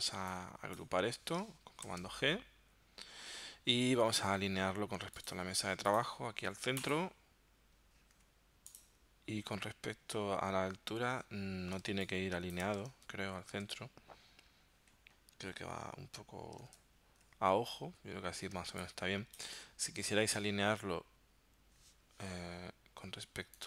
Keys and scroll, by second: 1.9 super+g, 11.9 space, 12.9 super+Tab, 16.8 super+Tab, 18.6 space.